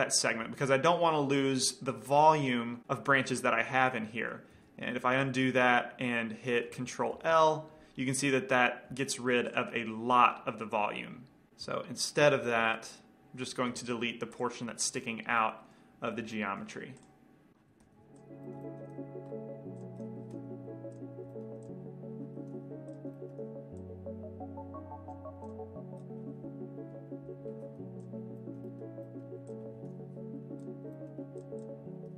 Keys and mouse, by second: 1.2 middle click, 4.5-6.2 middle drag, 5.4 ctrl+z, 7.8 ctrl+l, 9.4 x, 12.3 ctrl+z, 13.3 ctrl+z, 14.1 x, 16.0 middle click, 17.6 right click, 18.1 ctrl+l, 18.3 x, 18.7 middle click, 18.9 middle click, 19.1 c, 20.6 ctrl+l, 20.9 x, 22.1 x, 22.7 ctrl+l, 22.9 x, 23.8 c, 27.9 x, 29.7 click, 30.1 ctrl+l, 30.6 x, 31.1 middle click.